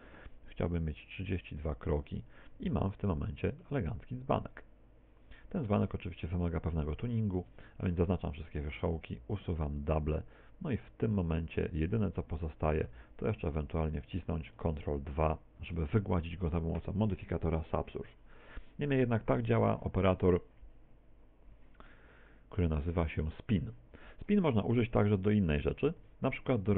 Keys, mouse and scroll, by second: 1.1 click, 3.4 middle click, 4.0 middle click, 6.0 Tab, 6.4 middle click, 7.5 Tab, 7.8 a, 8.0 a, 11.6 z, 12.4 middle click, 13.0 z, 13.3 middle click, 14.0 Tab, 15.0 ctrl+2, 15.8 middle click, 18.0 middle click, 19.4 Tab, 22.2-23.9 scroll up 4, 25.4 KP_1, 26.0 Tab.